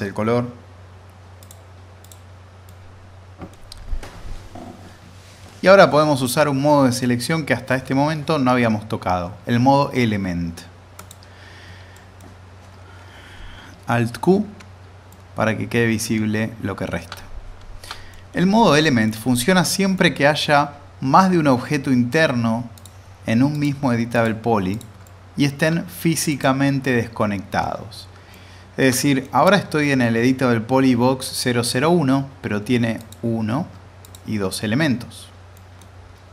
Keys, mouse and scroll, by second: 1.4 click, 2.6-3.6 middle drag, 11.0 click, 11.9 middle click, 12.3-13.7 scroll down 1, 14.4 alt+q, 15.1-18.2 alt+middle drag, 17.1-17.6 middle drag, 18.4-18.7 scroll down 2, 18.8 alt+middle click, 19.3-19.6 scroll up 2, 19.9-20.3 middle drag, 22.7-25.0 drag, 26.3 click, 28.3-28.9 alt+middle click, 33.0 click, 35.5 middle click, 36.1-36.3 scroll up 1.